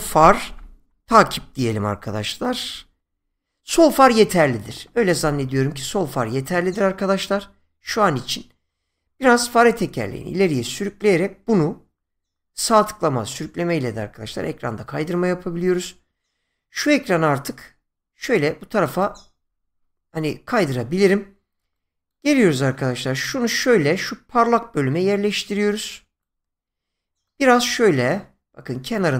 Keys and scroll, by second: 0.0-1.5 typing, 2.7 BackSpace, 4.0 Return.